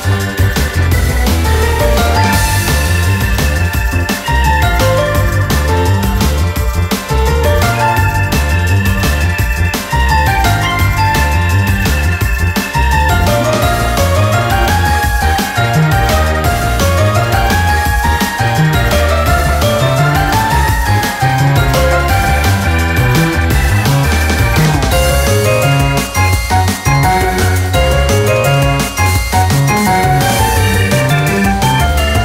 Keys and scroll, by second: 0.0-0.1 typing, 0.0 ctrl+=, 0.4 ctrl+-, 1.7-3.0 typing, 5.4-6.9 typing, 12.6 ctrl+-, 13.0 ctrl+-, 20.2 typing, 22.6 ctrl+u, 25.5 ctrl++.